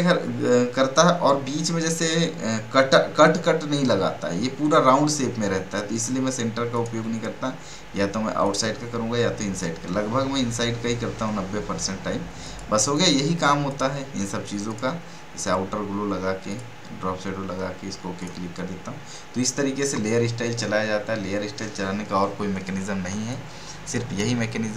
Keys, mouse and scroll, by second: 3.2-3.8 scroll up 1, 3.8 scroll down 1, 5.9-10.1 drag, 10.1 scroll down 1, 12.4 click, 23.1 space, 23.3 click, 24.2 space.